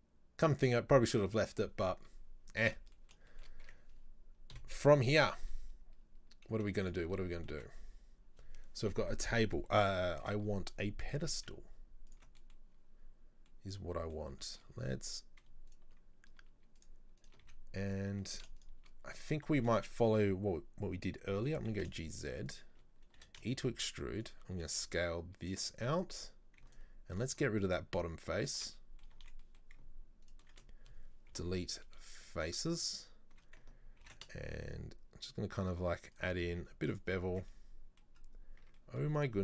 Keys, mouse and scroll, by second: 3.0-3.7 middle drag, 3.7 Tab, 4.6 KP_7, 5.3 a, 5.6-6.6 scroll down 3, 6.6 z, 7.2 middle click, 7.6 Tab, 10.3 KP_7, 11.3 g, 12.4-12.8 middle drag, 12.8-13.5 scroll up 2, 13.5-15.0 middle drag, 14.7 scroll up 1, 15.0 Tab, 15.7 alt+right click, 16.8 shift+right click, 17.3 shift+right click, 17.5 z, 18.3 shift+middle click, 18.6 shift+right click, 19.2 shift+middle click, 19.8 scroll up 2, 21.5 g, 23.2 e, 26.0 alt+right click, 26.8 alt+right click, 27.3 alt+right click, 28.8-30.3 middle drag, 30.3 alt+shift+right click, 30.7-31.3 scroll down 2, 31.3 scroll down 1, 31.4 Delete, 33.0 alt+right click, 34.1 ctrl+b, 36.6 z, 37.2 scroll down 3, 37.4 Tab, 37.6 middle click, 38.2-38.7 scroll up 1, 38.7 Tab, 38.8 middle click, 39.3-39.4 scroll up 2.